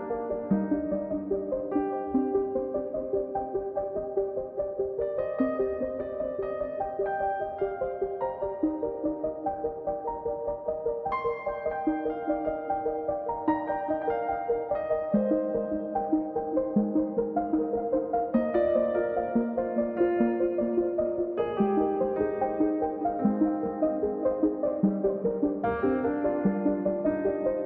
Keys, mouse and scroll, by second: 2.2 middle click, 2.8 scroll down 1, 3.0-4.2 drag, 4.2 middle click, 5.0 click, 5.2-6.2 middle drag, 6.2 click, 6.4-7.4 middle drag, 7.4 click, 7.6-10.3 middle drag, 10.3 KP_1, 10.8-11.5 scroll up 4, 11.5-14.0 drag, 14.4-14.9 scroll up 1, 14.9 click, 15.3-15.9 scroll up 2, 15.9-17.4 drag, 23.9-25.2 drag.